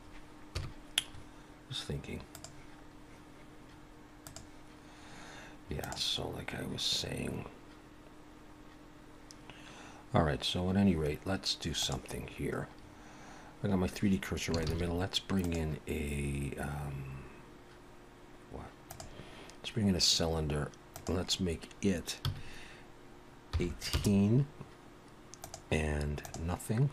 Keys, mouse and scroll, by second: 0.6 scroll down 1, 0.6 KP_1, 2.3 click, 4.2 click, 14.7 shift+a, 20.9 click, 25.4 click.